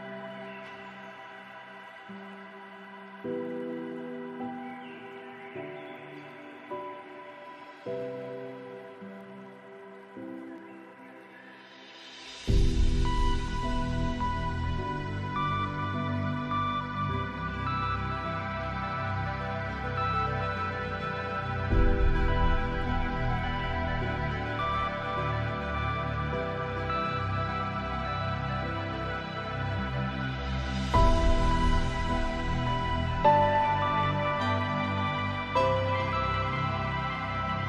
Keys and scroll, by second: 8.9 ctrl+space, 30.6 ctrl+space.